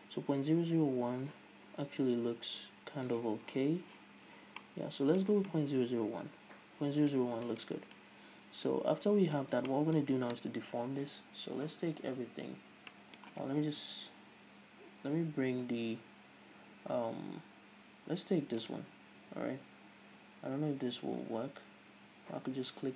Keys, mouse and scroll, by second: 3.3 Return, 3.4 Tab, 4.2-4.7 scroll down 2, 4.7-5.5 middle drag, 5.5 scroll down 2, 5.6-7.3 middle drag, 7.3 scroll up 2, 7.4 scroll down 2, 7.6 shift+middle drag, 7.8 scroll up 2, 8.1-18.7 middle drag, 9.5 scroll up 2, 9.6 scroll down 2, 12.0 Tab, 12.2 a, 12.8 scroll down 2, 14.0 KP_1, 15.2-16.0 scroll up 2, 16.0 Tab, 18.7 right click, 19.4 Tab, 19.9 a, 22.2 Tab, 22.6-22.9 scroll up 1.